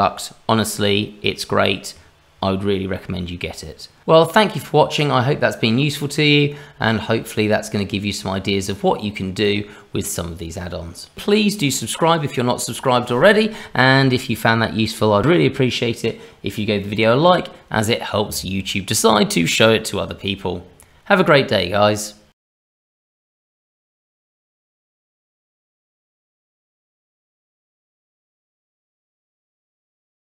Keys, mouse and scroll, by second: 4.0 middle click, 5.2-6.5 scroll up 2, 6.5 middle click, 6.5-6.8 scroll up 1, 8.6 click, 9.3 click.